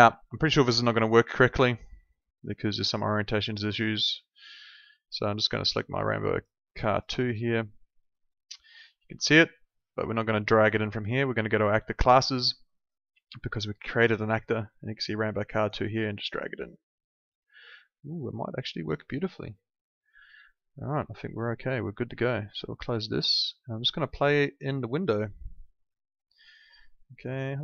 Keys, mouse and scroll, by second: 3.0 click, 6.9 click, 12.3 click, 16.3 click, 21.1 click, 26.4 w.